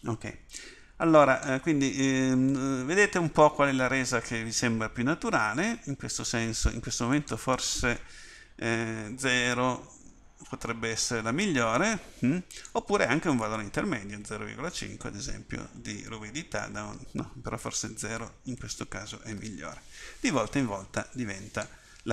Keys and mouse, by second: 0.6-10.1 drag.